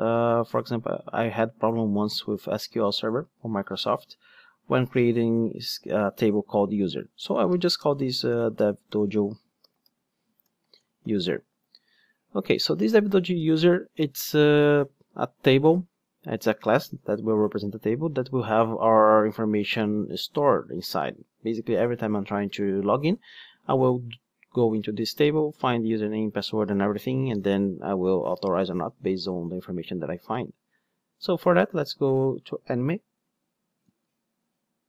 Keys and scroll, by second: 33.8 super+c.